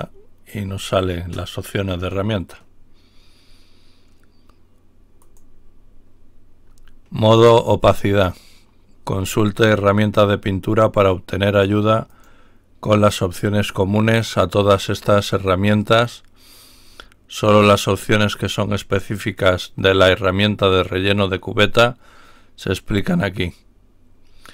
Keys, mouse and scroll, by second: 0.0 click, 5.1 click, 8.0-8.4 scroll down 2, 12.1 click.